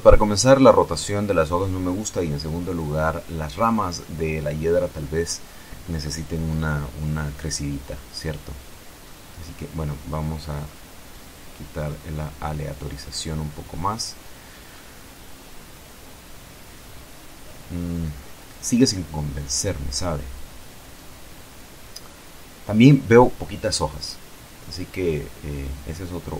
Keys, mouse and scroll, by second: 9.0-10.1 drag, 10.6 F12, 23.7 Escape.